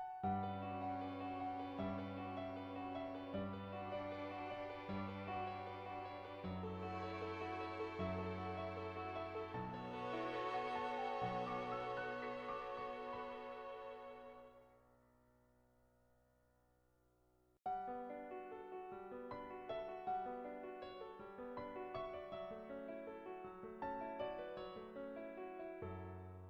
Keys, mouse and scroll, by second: 0.5 click, 1.6 click, 2.3 ctrl+z, 4.0 click, 4.5-9.2 drag, 9.6 click, 10.6 ctrl+z, 12.1-13.5 drag, 14.1 click, 15.5 ctrl+z, 16.2 click, 17.5 click, 18.4 ctrl+z, 19.1-22.8 drag, 23.1 click, 25.1 ], 25.2 ], 25.6-26.4 drag, 25.6 ].